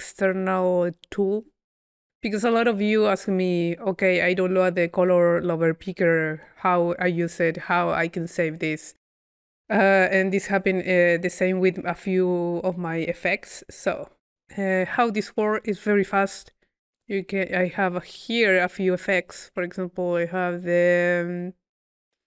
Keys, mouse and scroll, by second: 15.0-15.9 drag, 20.1-21.1 drag.